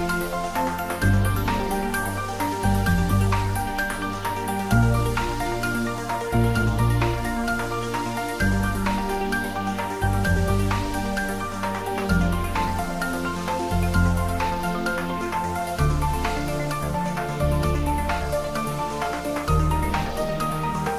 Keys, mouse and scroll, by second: 1.2-5.8 drag, 5.8-8.8 shift+drag, 8.8 shift+scroll down 1, 9.2 middle click, 10.6 click, 12.5 scroll down 1, 13.9-15.7 typing, 17.0-17.8 typing, 18.8 click, 19.6 Tab, 20.1-20.6 scroll down 1, 20.6 click.